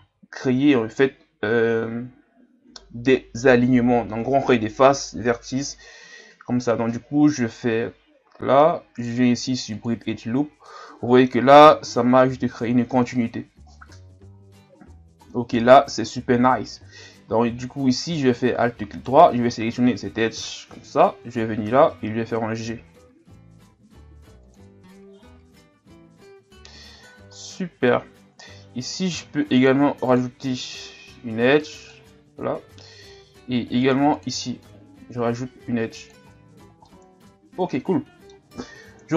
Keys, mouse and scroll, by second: 0.0 ctrl+e, 10.7 middle click, 11.6 scroll up 2, 14.8 scroll down 3, 15.3-18.5 middle drag, 18.5-18.9 scroll up 1, 18.9-20.4 alt+right drag, 20.4 KP_3, 21.9 g, 24.8-25.4 scroll down 6, 26.8-27.1 scroll up 1, 29.1 ctrl+r, 30.6-33.5 drag, 33.5 ctrl+r, 34.6-36.3 drag, 36.3-36.9 scroll down 2, 36.9-39.0 middle drag, 39.0 KP_1.